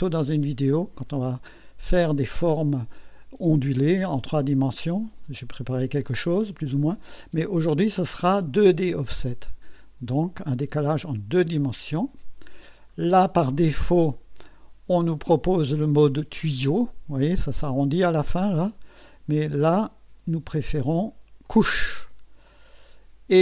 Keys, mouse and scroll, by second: 11.6 click, 12.9-13.2 scroll up 1, 13.2 middle click, 14.1-14.8 right drag, 18.5 scroll up 1, 19.1 right click, 20.6 click, 21.5 click, 22.6 scroll down 2.